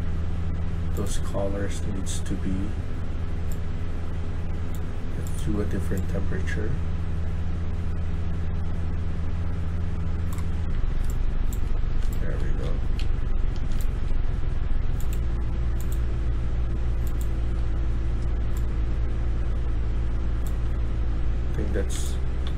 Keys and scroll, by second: 10.2-14.1 typing, 21.1-22.5 typing.